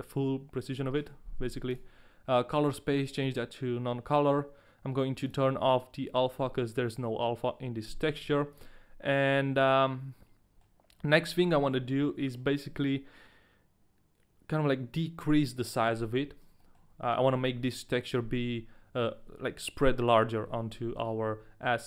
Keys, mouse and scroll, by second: 1.7 click, 5.9 click, 8.4 ctrl+a, 9.6 middle click, 11.1 middle click, 11.8 scroll up 2, 12.0 middle click, 12.2 scroll down 2, 16.1 scroll up 1, 16.8 shift+middle click, 16.8-19.2 scroll up 1.